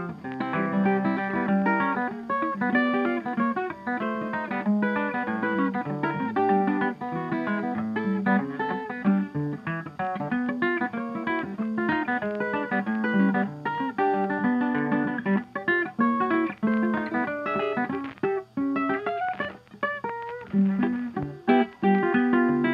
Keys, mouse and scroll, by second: 0.8-2.0 drag, 2.9-4.0 drag, 4.5 click, 7.8 click, 9.2-9.5 scroll, 9.7-10.3 scroll down 3, 15.8 click, 17.2-17.5 typing, 19.7-20.7 drag.